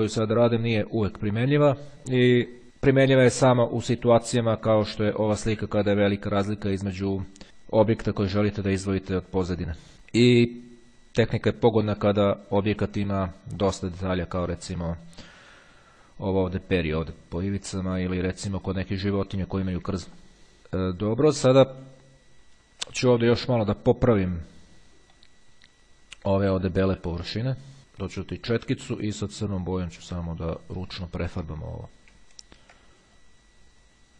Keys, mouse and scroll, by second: 4.6 click, 22.0-22.7 ctrl+scroll up 2, 24.4-25.9 middle drag, 30.2-32.0 drag, 32.4-33.0 ctrl+scroll up 2, 33.4-34.1 drag.